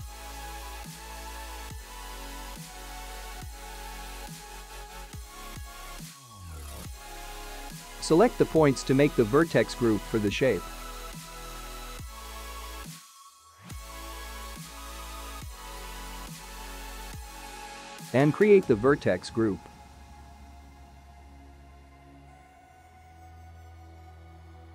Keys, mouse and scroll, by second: 1.5 middle click, 5.4 click, 6.6 click, 7.7-9.0 scroll up 3, 9.0 shift+middle click, 11.2 click, 12.7 shift+click, 14.3 middle click, 17.1 scroll down 2, 18.4 click, 19.6 click, 21.6 click, 21.7 click, 24.1 BackSpace.